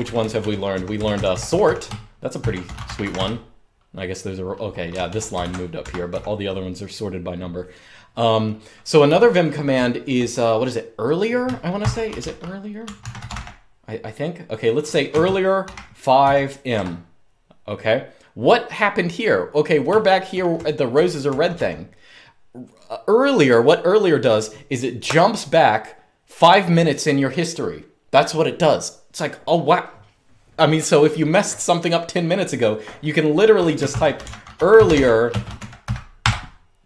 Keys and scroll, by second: 0.0-5.8 typing, 8.8-10.0 typing, 11.2-13.7 typing, 14.8-16.4 typing, 19.6-20.2 k, 20.2-20.8 j, 21.2 j, 33.3-36.0 typing.